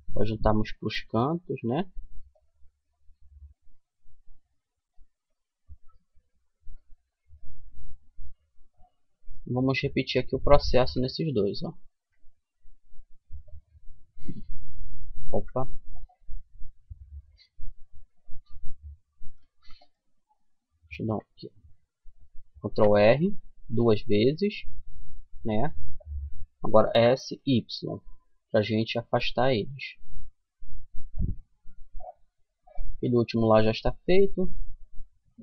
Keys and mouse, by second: 2.3-10.1 middle drag, 10.1 a, 11.3 ctrl+r, 20.2 ctrl+z, 22.0 ctrl+r, 31.1-33.9 middle drag, 34.7-35.4 middle drag.